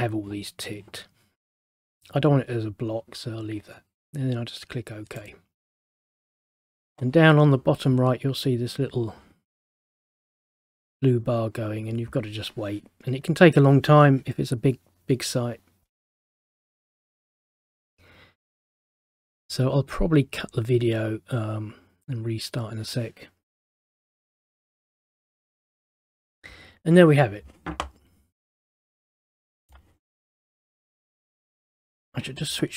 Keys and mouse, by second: 5.3 click, 28.6 middle click, 29.3 middle click, 31.6 click.